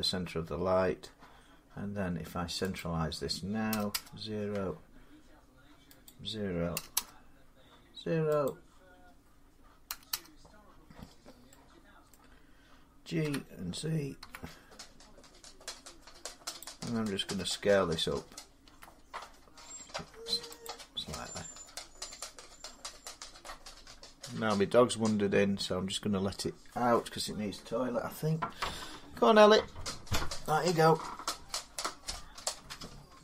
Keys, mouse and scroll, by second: 2.6 click, 3.5 typing, 5.9 click, 6.6 typing, 7.6 Return, 8.3 click, 9.7 0, 9.9 Return, 11.9 middle click, 13.1-14.0 typing, 15.0-16.4 middle drag, 16.4-25.5 drag, 18.5 s, 18.8 g.